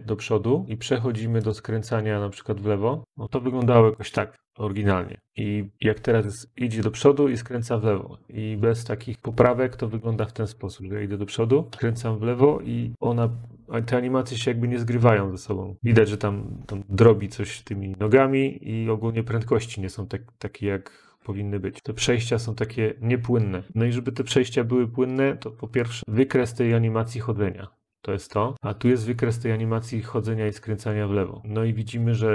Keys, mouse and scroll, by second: 1.4 click, 4.1 click, 8.6 click, 11.2-11.5 Up, 11.7 Up, 11.7-13.7 Left, 15.2 Up, 15.2-16.5 Left, 17.6 Left, 18.0-18.7 Left, 19.0 Left, 19.1 Left, 19.3 Left, 19.4-19.8 Left, 20.1 Left, 20.1 Left, 20.3-21.0 Left, 21.8 Left, 21.8 Left, 21.9 Left, 22.2-22.7 Left, 23.3 Left, 26.0 click, 26.5 click.